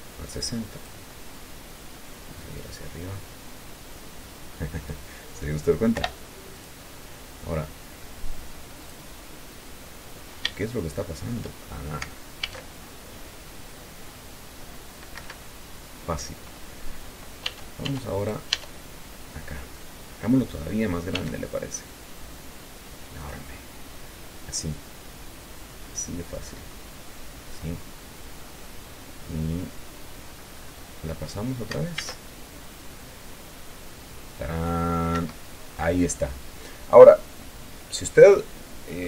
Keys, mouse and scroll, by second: 0.2-1.4 drag, 2.7-5.4 drag, 6.3 i, 6.9 click, 9.1 click, 10.4-11.0 scroll up 3, 11.0-12.3 shift+middle drag, 12.8 alt+a, 15.5 Escape, 16.3-17.2 scroll down 4, 17.2 scroll up 2, 17.8 Tab, 18.5 right click, 21.5 s, 23.5 click, 23.9-27.2 drag, 27.8-28.7 scroll up 1, 28.7-29.2 scroll up 1, 29.2-29.9 scroll down 1, 30.5-31.2 scroll up 1, 32.3 alt+a, 35.5 Escape, 37.2-39.0 drag.